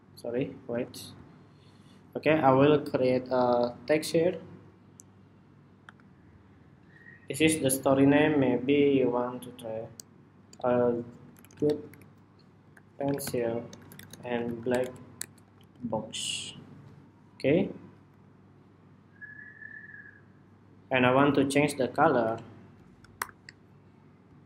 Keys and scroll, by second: 0.4 super+z, 16.1 Escape, 17.4 Escape, 22.9 shift+super+y.